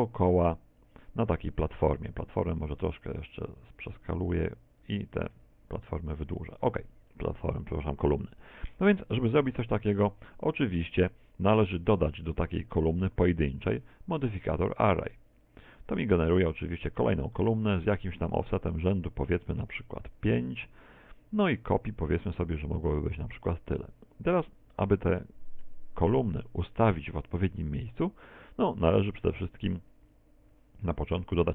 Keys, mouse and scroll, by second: 1.7 right click, 2.2 s, 4.0 click, 4.0 middle click, 4.8 right click, 5.2 s, 6.9 click, 6.9 scroll up 2, 7.2 scroll down 1, 7.2-7.6 scroll down 1, 7.6 shift+middle click, 8.2 middle click, 9.2 middle click, 13.2 middle click, 14.6 click, 18.4 click, 22.1 click, 24.4 middle click, 27.1 middle click.